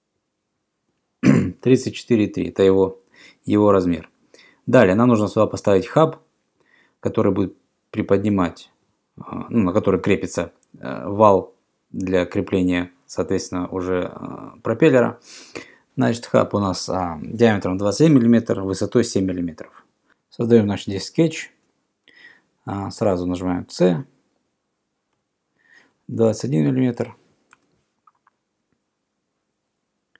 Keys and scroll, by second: 23.2 c, 25.9-26.8 typing, 27.7 Return.